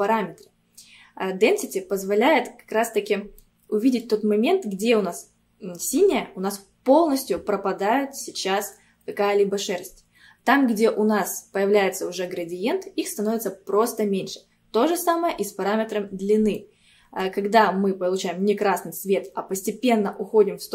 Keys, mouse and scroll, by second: 3.4-6.5 middle drag, 16.6-19.6 middle drag.